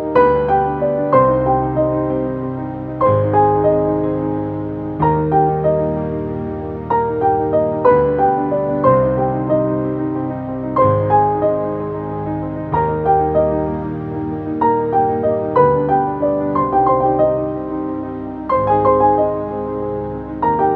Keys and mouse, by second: 1.9 click, 5.7 click, 6.3-7.2 typing, 8.6 click, 13.7 f, 15.2 6, 16.8-17.6 typing, 19.7 Return.